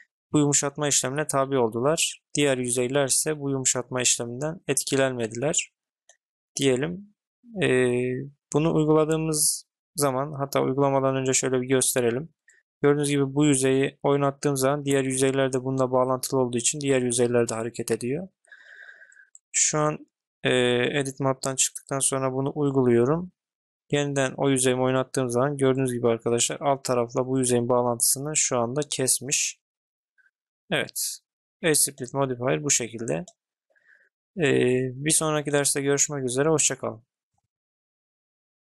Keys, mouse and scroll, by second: 5.3-6.3 middle drag, 6.9 middle click, 7.0-8.7 drag, 8.7-10.4 middle drag, 10.4 click, 10.9 Tab, 11.6 middle click, 12.4-14.3 drag, 13.3 g, 14.3 click, 14.5 click, 15.8 click, 16.6 g, 19.1-20.9 drag, 20.1 Tab, 21.9 click, 22.9 Tab, 24.1 g, 26.2 middle click, 26.4 middle click, 27.5 middle click, 28.1 KP_Decimal, 28.9 g, 31.7 click, 33.0 Tab.